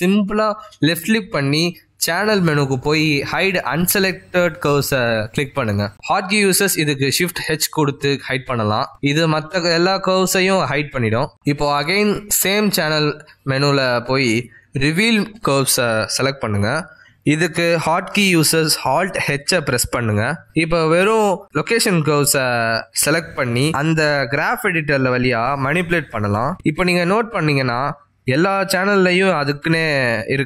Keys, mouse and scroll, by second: 1.5 click, 7.2 ctrl+z, 8.5 shift+h, 11.3 click, 11.5 shift+h, 12.7 click, 13.8 shift+h, 16.1 click, 18.5 ctrl+z, 19.3 alt+h, 23.6 click, 24.1 shift+click, 24.5 shift+click, 25.4 shift+h, 28.0 click, 28.3 g.